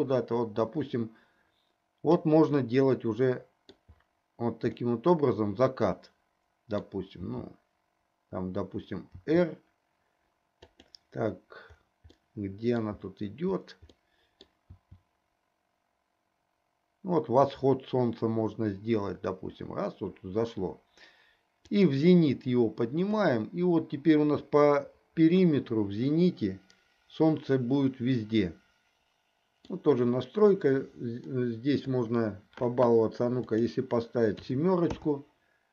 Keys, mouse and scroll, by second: 2.9-3.9 middle drag, 5.1-7.0 middle drag, 7.3 g, 12.3-13.0 middle drag, 14.2 middle click, 14.8 r, 23.4-30.0 middle drag, 31.4 middle click, 33.5-35.4 drag.